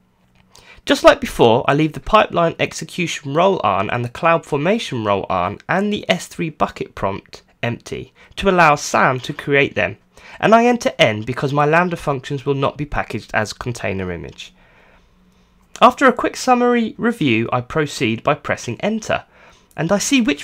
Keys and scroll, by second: 0.0-1.1 typing, 2.3 Return, 4.4 Return, 7.4 Return, 11.4 Return, 14.8 Return.